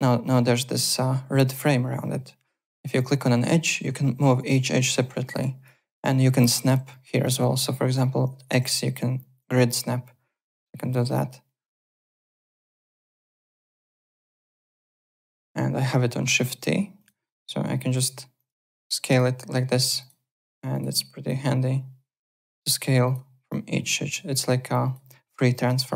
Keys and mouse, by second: 2.9 click, 3.6 click, 5.3 click, 6.9 alt+middle click, 7.1 alt+right click, 8.9 x, 9.4 click, 11.9 x, 12.2 click, 12.8 click, 13.4-14.2 typing, 13.8 click, 16.3 shift+t, 16.9 click, 18.3 click, 20.0 click, 20.7 click, 21.2 click, 23.0 click, 24.8 click, 25.5 click.